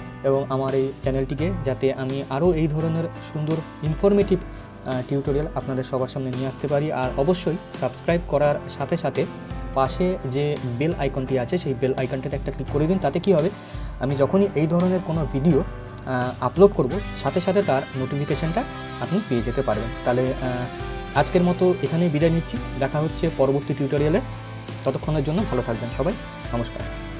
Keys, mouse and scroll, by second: 4.3-4.6 scroll up 1.